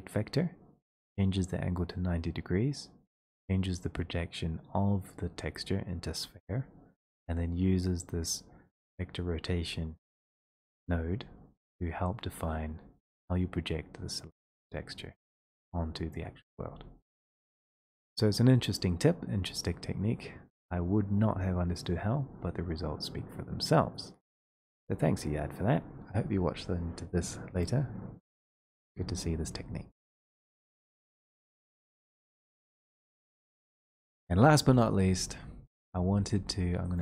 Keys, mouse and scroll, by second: 15.4 click, 21.9 click, 24.7 click, 34.3-36.9 drag.